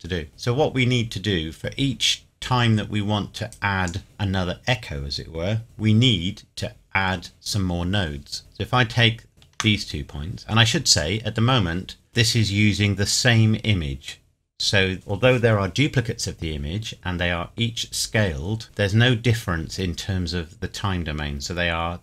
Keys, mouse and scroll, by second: 3.5 click, 8.4 click, 9.3 shift+click.